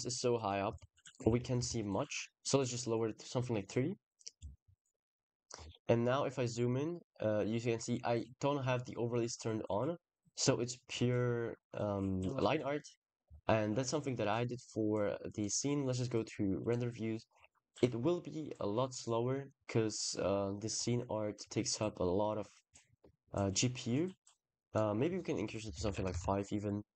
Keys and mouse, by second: 12.7 middle click, 13.1 middle click, 18.1 drag, 22.1 shift+click, 24.6-26.9 drag.